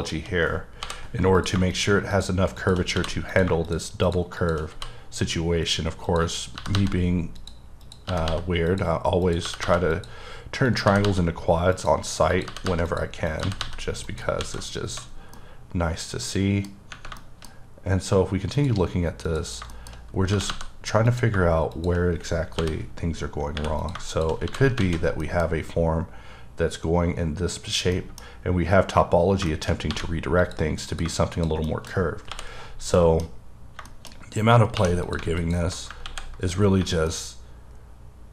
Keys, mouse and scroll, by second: 0.0 shift+click, 0.9 j, 1.4 click, 1.7 double click, 2.2 shift+click, 2.6 shift+double click, 3.0 f, 3.3 click, 4.1 shift+double click, 4.4 shift+click, 4.8 f, 6.1 click, 6.6 g, 6.8 g, 7.4 click, 7.9 click, 8.1 g, 8.3 g, 8.7 click, 9.2 click, 9.4 g, 9.6 g, 9.9 click, 10.7 click, 10.9 g, 11.0 g, 11.8 click, 12.3 click, 12.5 g, 12.7 g, 12.9 click, 13.3 click, 13.4 g, 13.6 g, 14.1 click, 14.4 alt+a, 14.7 scroll down 2, 15.3 scroll down 1, 15.4 middle click, 16.7 scroll up 1, 17.2 shift+middle click, 17.5-18.6 scroll up 1, 18.6 click, 19.3 click, 19.7 shift+middle click, 19.9-20.3 shift+scroll up 1, 20.3 g, 20.5 g, 21.1 click, 22.6 j, 23.6 3, 23.8 click, 23.9 shift+click, 24.5 f, 24.9 alt+a, 25.2 middle click, 25.5-27.7 scroll down 3, 28.0 middle click, 28.3-29.4 scroll up 1, 29.4-29.9 shift+scroll up 2, 29.5 shift+middle click, 29.9 1, 30.4 click, 30.9 click, 31.1 shift+click, 31.7 shift+middle click, 32.0 scroll up 1, 32.3 j, 32.6-33.0 scroll down 1, 33.0 middle click, 33.6-33.9 scroll up 2, 33.9 shift+middle click, 34.8 2, 35.1 click, 35.4 alt+click, 36.1 x, 36.6 scroll down 2, 37.1 middle click.